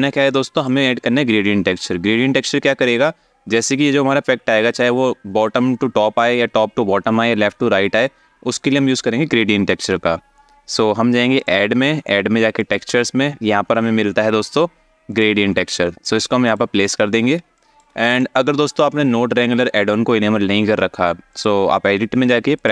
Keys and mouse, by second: 0.2 click, 11.0-16.2 drag, 17.3 alt+shift+middle click, 17.7 click, 21.1-22.4 drag.